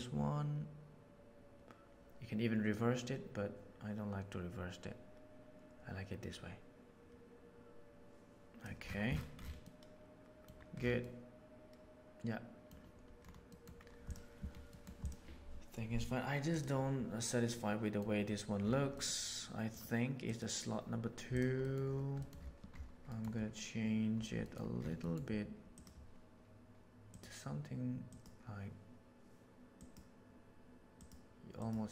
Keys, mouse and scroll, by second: 0.0-3.3 drag, 6.7 click, 9.7 middle click, 10.9-12.7 middle drag, 13.4 middle click, 17.5-17.9 middle drag, 19.0 middle drag, 19.6-20.1 drag, 20.4-20.8 drag, 21.7 middle click, 24.5 middle click, 25.1 middle drag, 25.7 right click.